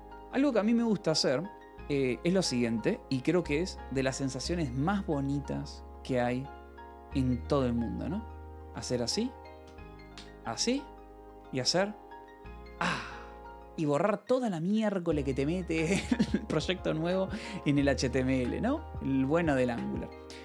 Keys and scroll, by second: 0.2 k, 0.2 space, 3.7-5.4 typing, 5.6 ctrl+p, 5.8 Return, 9.0 shift+v, 10.7 shift+g, 11.1 k, 12.6 c, 13.2 Escape, 14.2 ctrl+s, 17.4 Escape, 18.5 k, 19.0 j, 20.0 j.